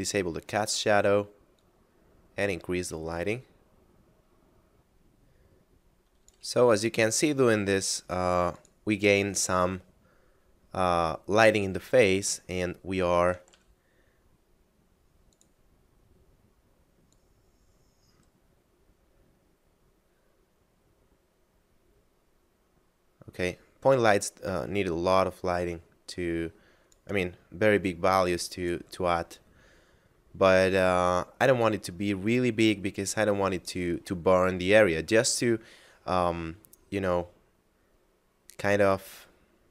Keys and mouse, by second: 4.7 click, 7.0 g, 8.6 click, 12.4 shift+middle click, 13.5 g, 15.3 click, 27.8 click, 29.9 middle click, 31.6 click.